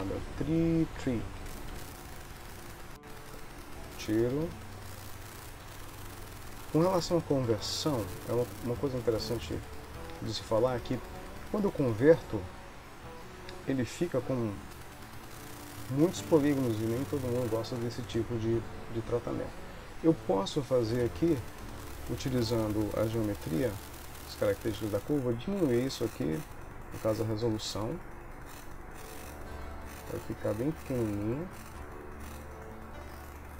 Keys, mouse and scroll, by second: 0.3 e, 4.0 click, 5.1 click, 5.7 g, 7.9 g, 9.6 click, 14.4 click, 15.3 ctrl+middle click, 21.9 middle click, 25.2 click.